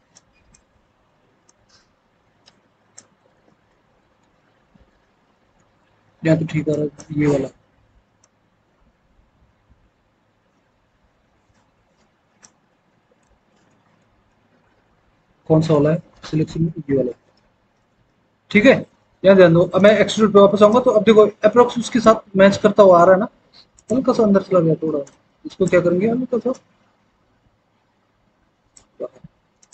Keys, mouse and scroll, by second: 12.8 alt+w, 13.1 alt+w.